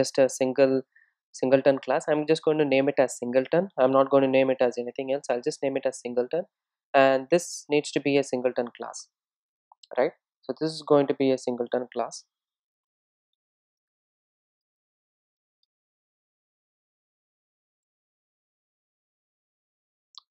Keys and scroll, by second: 0.7 super+n.